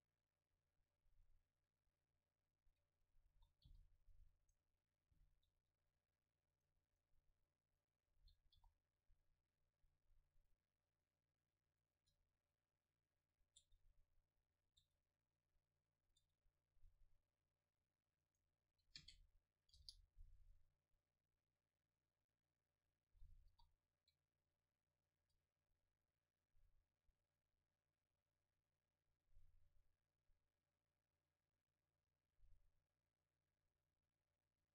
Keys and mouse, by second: 3.4 s, 4.6-6.6 right drag, 5.2 o, 6.6-8.8 drag, 8.8 s, 12.0 Tab, 13.6 Tab, 13.7 Tab, 14.9 Tab, 16.3 Tab, 17.9-19.1 drag, 19.0 space, 23.7 s, 25.3 Tab, 25.3-29.0 drag, 26.1-28.5 middle drag, 26.1-27.3 right drag, 27.6 right click.